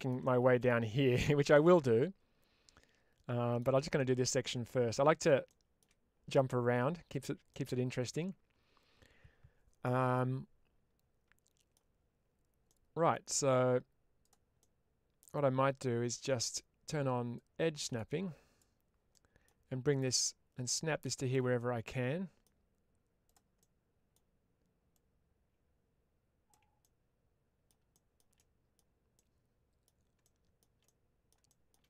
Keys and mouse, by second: 0.2 middle click, 1.3-3.4 middle drag, 3.9 middle click, 4.5 middle click, 5.3 shift+middle click, 6.3 middle click, 7.4-11.6 middle drag, 12.5 middle click, 14.5 middle click, 17.3-18.5 drag, 19.0 middle click, 19.9-21.2 ctrl+drag, 21.4 middle click, 23.5 middle click, 24.8-26.4 drag, 26.7 middle click, 27.8 shift+middle click, 28.2 shift+middle click, 29.0 middle click, 30.1 shift+middle click, 31.3 shift+middle click.